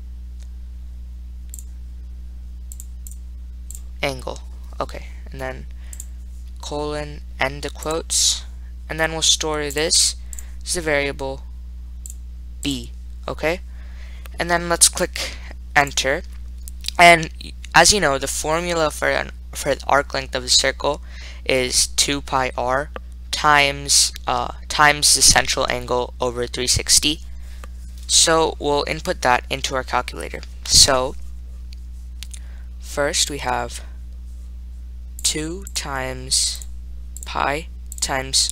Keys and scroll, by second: 3.3 ), 6.2 ., 10.6 ,, 16.1 Return, 33.5 (, 35.6 2, 35.9 *, 37.2-38.5 typing.